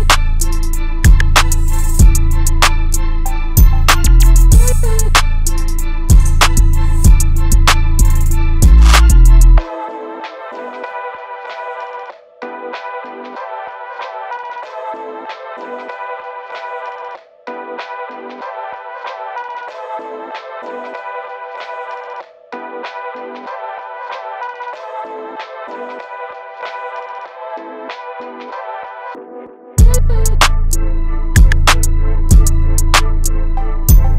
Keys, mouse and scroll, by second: 6.7-16.6 drag, 20.0-25.4 drag, 31.7-34.1 drag.